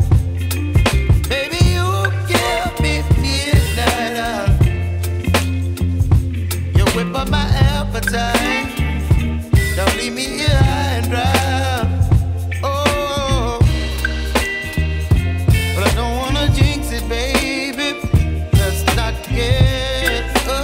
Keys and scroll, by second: 1.2 Return, 5.1 space, 12.2 b, 16.0 ].